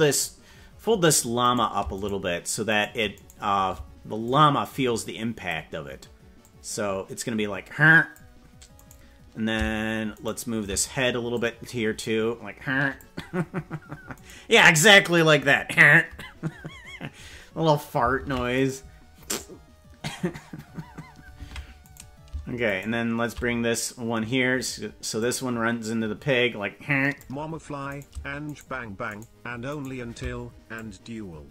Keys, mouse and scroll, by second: 1.7 right click, 2.1 shift+right click, 2.9 right click, 4.2-5.5 drag, 6.3-8.0 drag, 8.8 right click, 10.2 shift+right click, 11.3-13.0 drag, 14.2 right click, 18.2 ctrl+Tab, 18.6 right click, 21.4 ctrl+Tab, 22.1 right click, 22.9 shift+right click, 25.1-27.2 drag, 28.2 right click, 28.6 shift+right click, 29.2 right click, 30.7-31.5 drag.